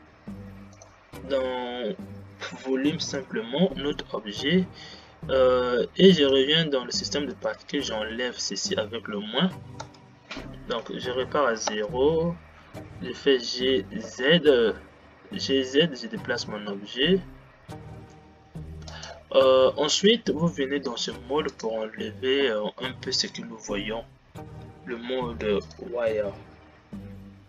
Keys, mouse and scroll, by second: 3.6-3.9 drag, 7.6-9.9 drag, 9.9 space, 11.2 shift+Left, 12.1 space, 13.0 g.